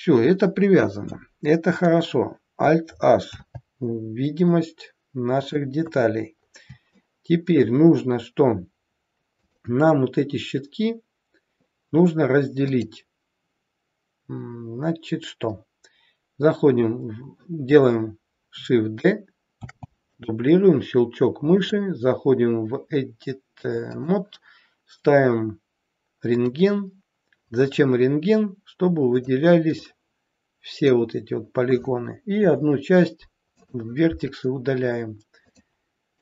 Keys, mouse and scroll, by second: 1.0 middle click, 3.3 alt+h, 4.5 middle click, 5.9 KP_1, 6.4 scroll up 2, 7.0 shift+middle click, 9.4 click, 12.7 click, 19.7 shift+d, 21.7 click, 26.4 click, 29.2 click, 32.3 Delete, 35.5 click.